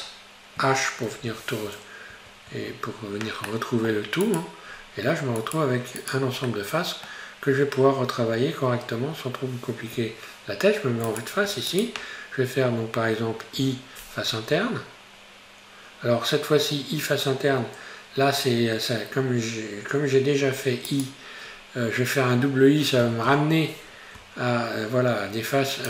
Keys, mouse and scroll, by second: 1.1 alt+h, 2.1 Tab, 2.5 Tab, 2.9-3.5 scroll down 2, 3.5 middle click, 4.3 right click, 4.7-5.4 scroll up 3, 5.4 right click, 6.0 right click, 6.6-9.6 middle drag, 10.0 3, 11.1 right click, 11.7 shift+right click, 13.6 i, 21.5-23.1 scroll up 1, 23.1 i.